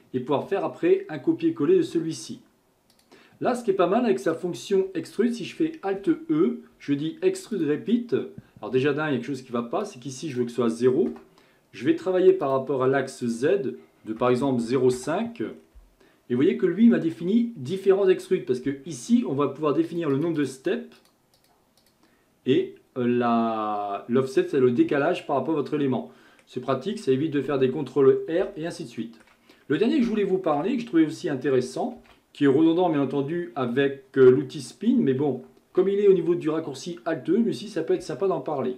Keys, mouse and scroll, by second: 2.9 click, 4.3 click, 6.0 alt+e, 9.8-12.5 drag, 13.2-15.5 drag, 15.5-16.4 scroll down 1, 16.4-16.9 scroll down 1, 16.9 shift+middle click, 17.4-19.9 scroll up 2, 19.9-24.9 drag, 25.2-26.8 middle drag, 26.8-27.6 scroll up 2, 27.6-28.7 scroll down 2, 28.7-30.6 shift+middle drag, 30.6 KP_1, 32.0 shift+a, 38.0 Tab.